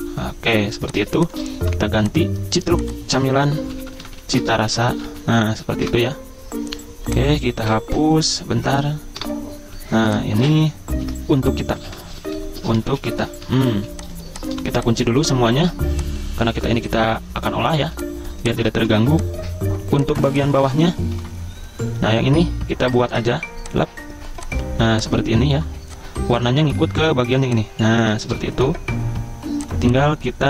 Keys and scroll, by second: 0.7-5.8 typing, 6.0 Escape, 7.7 F12, 8.3 Escape, 9.2 BackSpace, 11.0 ctrl+a, 11.7-14.5 typing, 15.6 ctrl+2, 17.9 z, 18.8 v, 20.3 z, 21.2 p, 26.8 i, 28.3 v, 28.6 a.